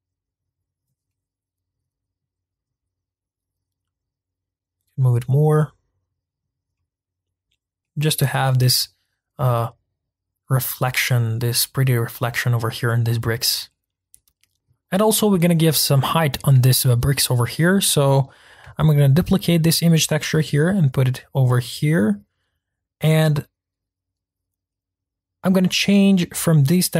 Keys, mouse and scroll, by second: 1.0-2.5 middle drag, 2.5-4.1 scroll down 1, 4.1 click, 5.5-6.4 middle drag, 6.4 scroll up 2, 6.7-7.8 middle drag, 7.8 scroll up 2, 7.8-8.4 middle drag, 8.4-8.9 scroll down 2, 8.9-9.4 scroll up 3, 9.4-13.4 middle drag, 13.4 scroll down 1, 13.7-14.5 middle drag, 14.5-15.1 scroll down 2, 15.1-17.0 middle drag, 17.0 scroll up 1, 18.2-19.2 drag, 19.2 shift+d, 21.6 click.